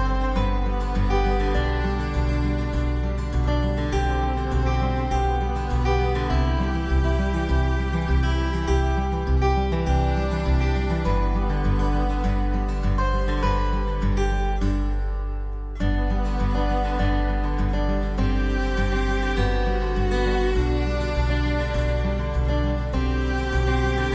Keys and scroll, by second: 4.9 ctrl+alt+z.